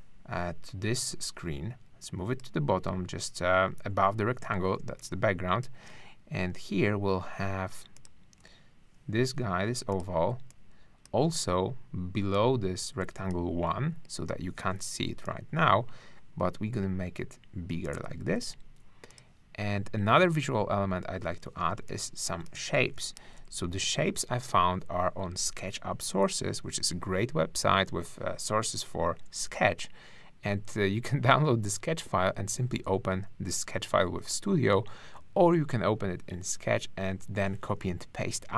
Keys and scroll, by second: 4.8 space, 21.8 space, 23.7 ctrl+alt+Right, 24.4 ctrl+Right.